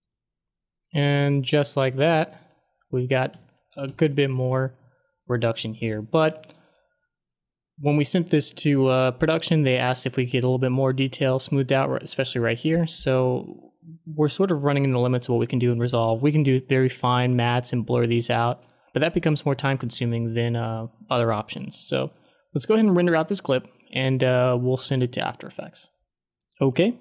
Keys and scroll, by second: 2.3 ctrl+d.